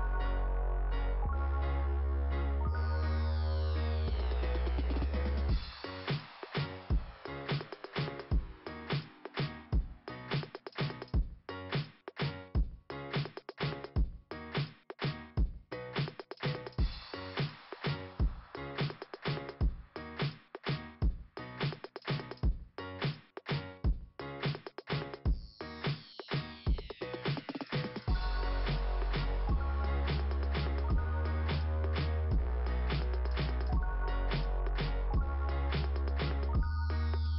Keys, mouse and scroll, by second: 4.7 click, 4.9 click, 7.2 click, 9.3 click, 9.4 click, 9.7 click, 10.1 click, 12.8 click, 13.3 click, 13.7 click, 13.9 click, 16.6 click, 16.7 click, 17.1 click, 18.2 click, 23.1 right click, 23.4 right click, 23.7 right click, 24.1 right click, 25.5 click, 25.6 click, 28.4 click, 28.5 click, 31.8 click, 32.0 click, 32.4 click, 32.7 click, 33.1 click, 33.2 click, 34.4 click, 35.8 click, 36.4 click, 36.8 click, 37.1 click.